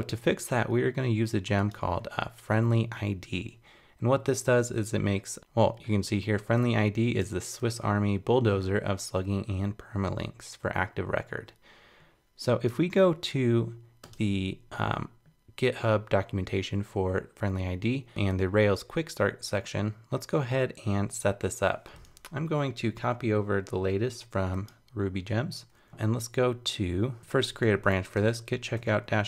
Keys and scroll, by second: 25.9 super+Tab.